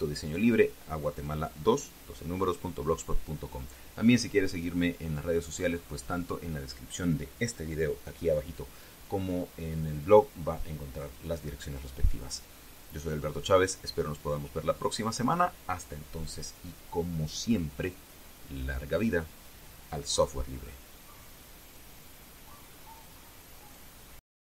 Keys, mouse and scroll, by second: 22.4 click, 24.4 click.